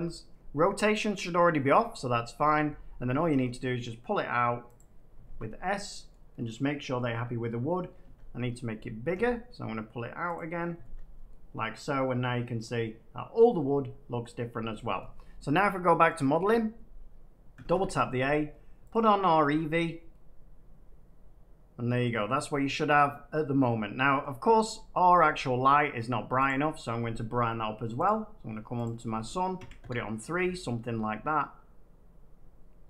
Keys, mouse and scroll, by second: 1.7-2.3 scroll up 6, 2.3 scroll down 1, 2.6 scroll, 3.0 scroll down 1, 3.4 s, 4.7 click, 5.2 Tab, 6.0-6.4 scroll, 7.0 scroll, 8.0 Tab, 9.0 s, 10.3 click, 10.8 Tab, 12.5 middle click, 14.1 middle click, 16.1 click, 17.5 a, 17.6 a, 18.8 click, 22.0-23.8 middle drag, 22.4 scroll down 1, 25.7 middle click, 26.4 click, 28.0 click, 28.8 click, 29.5 3, 29.7 Return.